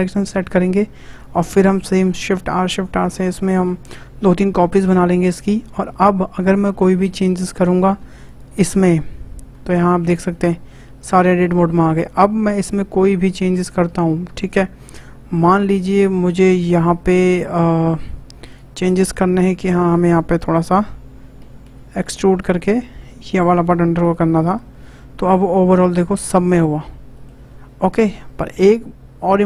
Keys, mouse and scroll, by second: 2.3 shift+r, 2.5 shift+r, 2.7 shift+r, 3.1 scroll down 3, 3.6-6.6 shift+middle drag, 6.6-7.3 scroll up 2, 7.3 shift+middle click, 7.8-8.2 scroll up 3, 8.2 click, 8.3 Tab, 8.5 Tab, 9.7 shift+middle click, 10.1 scroll down 2, 10.3-11.8 middle drag, 11.8-12.1 scroll up 1, 12.1-16.0 shift+middle drag, 16.0-16.4 scroll up 1, 16.4-18.5 shift+middle drag, 18.5 click, 18.9-21.4 middle drag, 21.4 e, 23.2 e, 24.4 click, 24.5 Tab, 24.8-26.8 middle drag, 26.8-27.1 scroll down 3, 27.1-29.4 shift+middle drag.